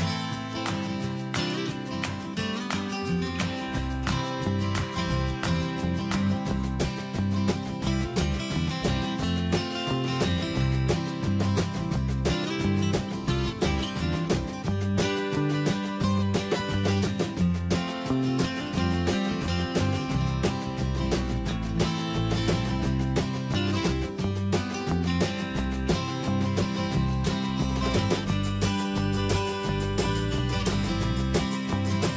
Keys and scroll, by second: 32.0 ctrl+space.